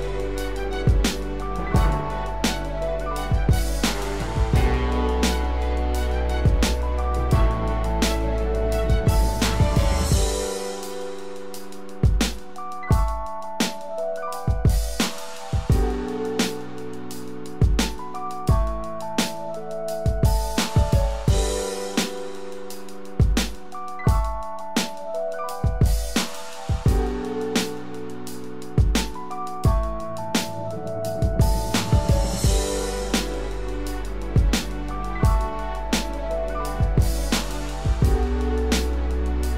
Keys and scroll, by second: 22.6 ctrl+0, 24.2 ctrl+=.